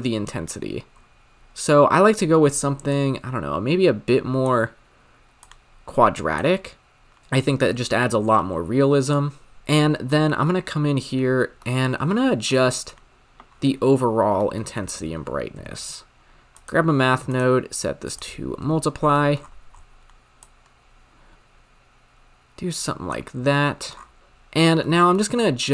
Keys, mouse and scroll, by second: 0.9-2.9 scroll up 4, 2.9-7.2 drag, 7.7-9.1 scroll down 10, 9.1 click, 9.6-16.7 drag, 16.7 shift+a, 17.6-18.0 scroll up 1, 18.0-19.0 drag, 19.0 scroll down 9, 19.2 middle click, 19.4-20.5 scroll up 13, 20.5-23.3 drag, 23.3 scroll down 6, 23.6 middle click, 24.0 scroll up 6, 24.2-25.7 drag.